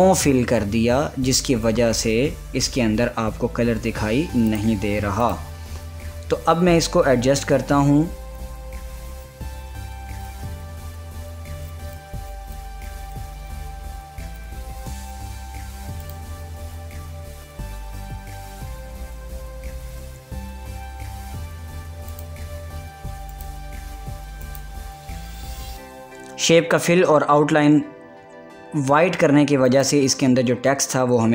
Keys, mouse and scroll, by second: 0.1 click, 5.2 click, 6.1 click, 6.8 scroll up 1, 7.4 scroll down 1, 8.5 click, 9.7 scroll down 1, 10.4 click, 11.1 scroll down 1, 11.9-16.7 drag, 16.7 click, 22.7 click, 30.3 click, 30.9 ctrl+a.